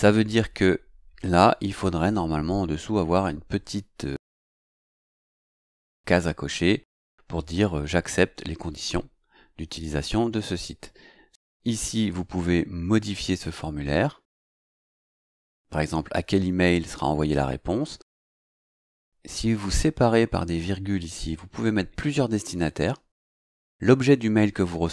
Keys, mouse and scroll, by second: 13.3 click.